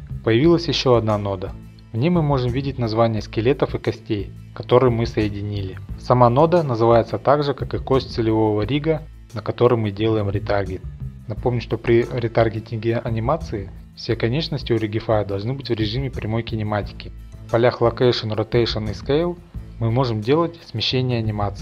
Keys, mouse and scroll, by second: 1.5-2.4 scroll, 2.4 middle click, 2.4-3.0 scroll, 4.7 click, 5.6 click, 6.8-7.7 scroll, 8.2 click, 9.6 click, 10.6 scroll up 3, 10.8 shift+middle click, 11.4 click, 11.4-11.8 scroll up 2, 11.8 click, 12.6 click, 13.0 shift+middle click, 13.4 click, 13.7 click, 14.4 click, 14.6-15.2 middle click, 15.2 shift+middle click, 15.3 middle click, 16.3 click.